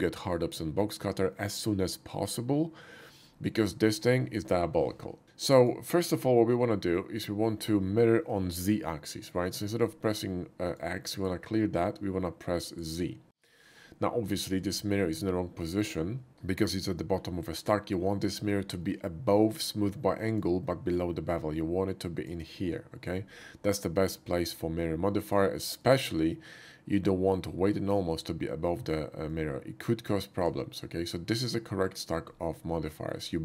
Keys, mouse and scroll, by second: 4.1 typing, 5.5 click, 6.3-7.2 middle drag, 10.6 click, 11.1 click, 12.6 click, 13.5 middle click, 15.3-16.3 middle drag, 16.9 middle click, 19.4-20.4 drag, 20.9-22.3 drag, 25.8-27.9 drag, 29.3-30.5 drag, 32.9 middle click.